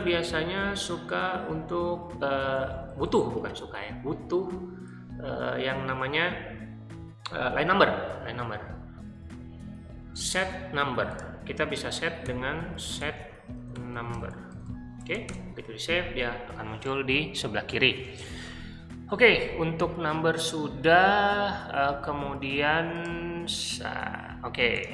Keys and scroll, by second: 0.0-3.0 typing, 4.8 j, 8.3-9.6 typing, 12.0-15.6 typing.